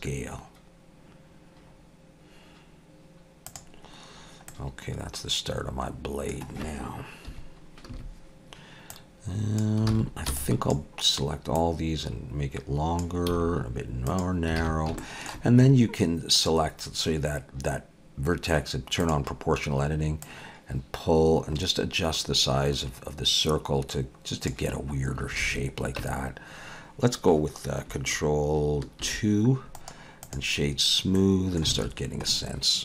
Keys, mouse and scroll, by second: 4.5 middle click, 7.3 KP_1, 7.9 a, 8.9 click, 9.9 alt+a, 10.3 b, 11.6 click, 13.3 s, 14.6 alt+a, 15.0 shift+middle click, 17.6 click, 19.0 click, 20.3 click, 25.4 alt+a, 26.0 Tab, 29.0 ctrl+2, 29.7 right click, 31.1 middle click, 31.7 alt+a, 31.9-32.8 scroll down 3, 32.3 middle click.